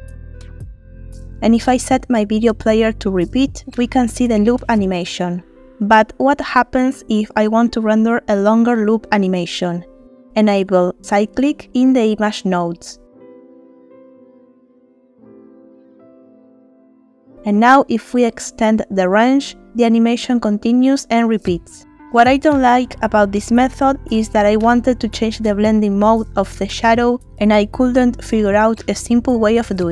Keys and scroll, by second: 4.2 space, 10.1 space, 19.8-20.3 typing.